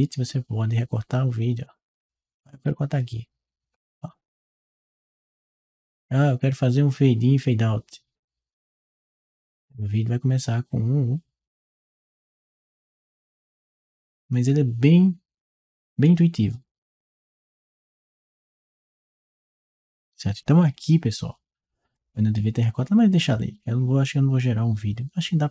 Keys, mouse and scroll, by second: 1.5 click, 2.4 click, 3.9 click, 4.3 click, 6.2 click, 8.0 click, 9.2-13.0 drag, 14.7-15.9 drag, 18.0 click, 18.6 click, 24.2-25.5 drag.